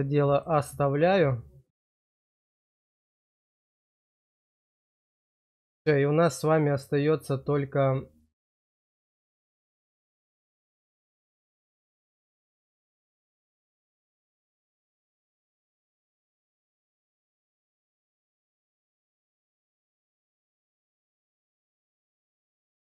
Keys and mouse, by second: 0.4-2.3 middle drag, 2.8 shift+middle click, 4.7 click, 5.5 shift+middle click, 6.1 click, 10.6 click, 11.5 click, 15.3-16.4 drag, 16.5 click, 19.1 click, 20.4 click, 21.9 click.